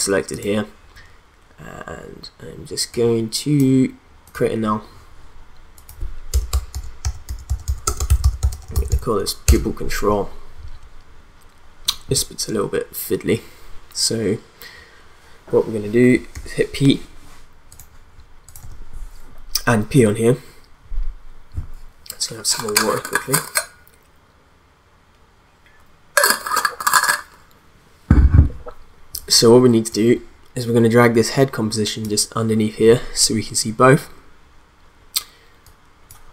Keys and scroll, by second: 6.3 Return, 6.5-9.4 typing, 9.4 Return, 16.3 p, 18.6 p.